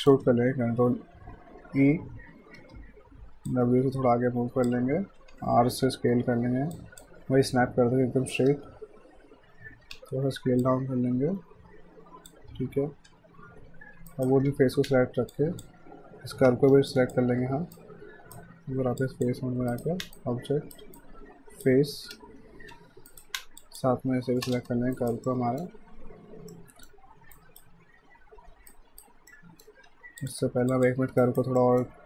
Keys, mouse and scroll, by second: 1.8 e, 3.5 click, 5.2 typing, 6.3-9.0 typing, 10.6 click, 12.6-13.1 typing, 14.1 alt+right click, 14.5 w, 15.4 shift+click, 16.5 q, 16.9 shift+click, 17.8 right click, 19.0 shift+click, 19.7 right click, 20.2 shift+right click, 22.2 space, 22.6 f, 23.1 alt+right click, 23.6 shift+click, 24.4 space, 25.0 alt+right click, 25.3 alt+middle click, 27.4 alt+right click, 28.7 alt+right click, 29.3 alt+middle click, 29.9 q, 30.2 click, 31.2 right click, 31.6 alt+middle click.